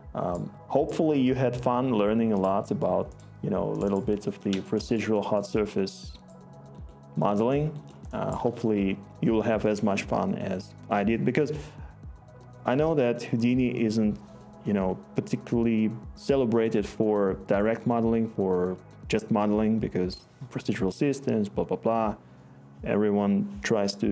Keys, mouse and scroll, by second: 5.0-6.9 scroll.